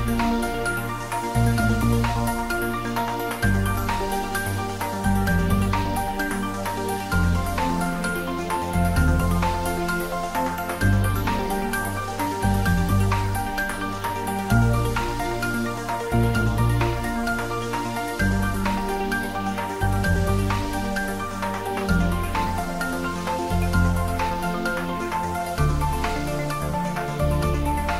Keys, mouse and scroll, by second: 0.3 click, 0.9 shift+d, 1.1 x, 3.5 click, 5.5 r, 6.0 click, 6.3 g, 7.5 click, 7.7 middle click, 8.8 g, 9.8 click, 10.1 scroll down 1, 10.3 middle click, 11.4 click, 12.1 shift+d, 12.5 y, 13.6 click, 13.8 g, 14.7 click, 15.2 g, 15.9 click, 18.2 s, 19.0 click, 19.2 scroll down 1, 19.4-20.9 middle drag, 20.9 click, 21.2 scroll up 1, 21.7 g, 22.7 click, 23.1 scroll down 1, 23.4 middle click, 24.1 s, 24.8 click, 25.2-27.5 middle drag, 27.5 click, 27.7 scroll down 1.